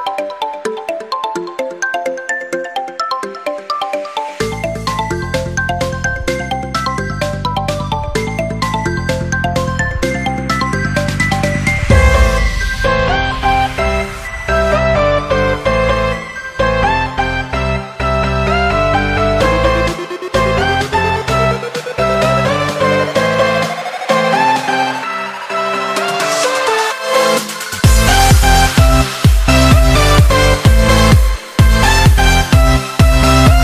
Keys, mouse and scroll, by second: 1.4 Tab, 2.2 Tab, 3.2 click, 3.7 click, 4.6-5.2 scroll down 1, 5.2 click, 5.6 click, 6.1 scroll down 2, 6.3-8.0 middle drag, 8.0 click, 9.4 KP_1, 10.6 s, 13.4 KP_7, 14.3-14.7 scroll down 1, 14.7 click, 15.2-15.6 scroll down 6, 15.6-17.4 middle drag, 17.4 KP_7, 18.6 click, 19.0 scroll up 4, 19.7 s, 21.2-21.5 scroll up 4, 21.5 Tab, 22.2 click, 23.2 click, 23.8 b, 24.7 z, 25.6 click, 26.4 b, 27.5-31.1 drag, 31.4 click, 31.9 b.